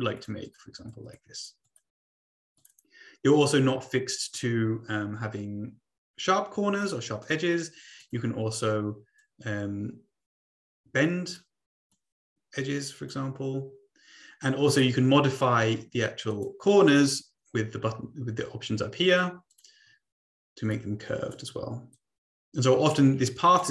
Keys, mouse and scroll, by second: 0.2 click, 0.6 click, 1.4 click, 1.7 click, 2.6 click, 7.2 click, 8.0 click, 9.2-11.4 drag, 11.9-13.1 drag, 14.6 click, 16.2 click, 19.5 click, 20.6 click, 21.9-23.0 drag, 23.3-23.7 drag.